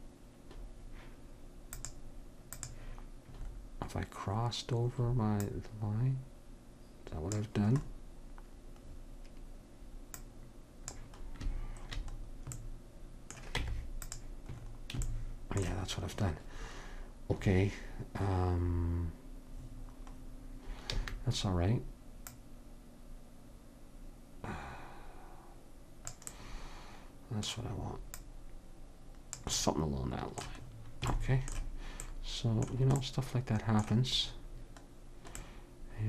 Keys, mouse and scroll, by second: 1.8-4.3 drag, 5.4-7.3 drag, 7.8-10.2 middle drag, 10.2-12.0 drag, 12.0 middle click, 13.6 Tab, 21.0 a, 22.4-24.1 drag, 28.2-30.1 drag, 29.7-31.5 middle drag.